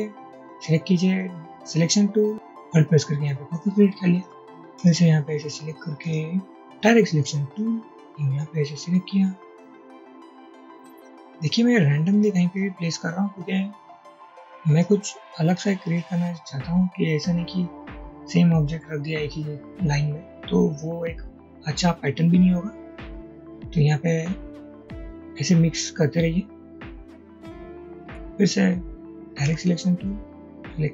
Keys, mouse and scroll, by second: 1.7 double click, 2.6 alt+click, 6.8 a, 16.0-16.6 drag, 16.9 click, 27.7 click, 29.6 a, 30.2 click.